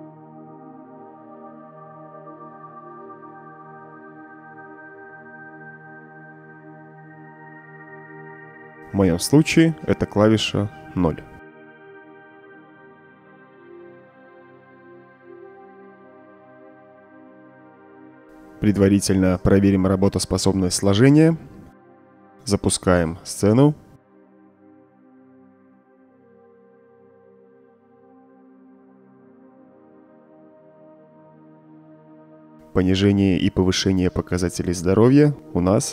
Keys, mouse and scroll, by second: 0.5 right click, 2.8-5.4 typing, 9.0 space, 10.9 0, 12.6 click, 14.0-15.5 drag, 16.9 click, 18.3 click, 19.8-20.2 right drag, 21.4 click, 22.2 click, 25.3 click, 27.4-30.8 typing, 33.0 Escape.